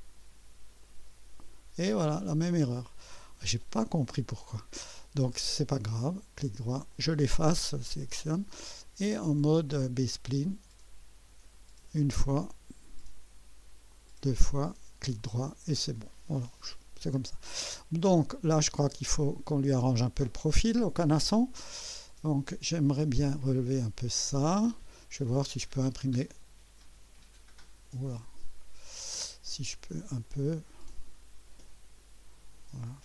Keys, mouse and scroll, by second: 0.8 click, 3.0 click, 6.0 right click, 6.9 click, 7.8 Delete, 10.4 click, 11.8 click, 13.9 click, 14.8 right click, 16.8 scroll up 1, 17.2 scroll down 1, 17.6 right click, 19.1 right click, 23.2-24.3 drag, 25.0-27.0 drag, 28.1 click, 30.2-32.2 drag.